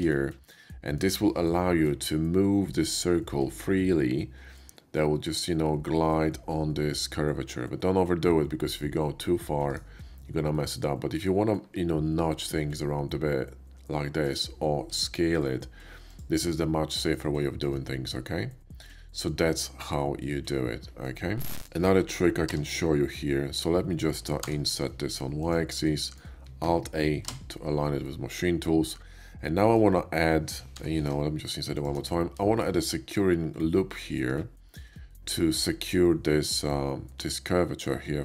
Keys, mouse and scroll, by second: 0.4-1.0 middle drag, 1.8 g, 9.7 right click, 10.5-11.2 middle drag, 11.6 g, 14.2 right click, 14.9 s, 16.1 click, 16.3 middle click, 17.5-19.8 shift+middle drag, 19.8-20.2 scroll down 2, 22.0 shift+middle click, 22.4 e, 24.6 y, 25.3 click, 25.9-28.0 middle drag, 26.5 alt+a, 27.3 alt+a, 28.9 middle click, 29.4 alt+middle click, 31.0 i, 31.8 shift+click, 32.1 shift+middle click, 32.5-35.3 shift+middle drag.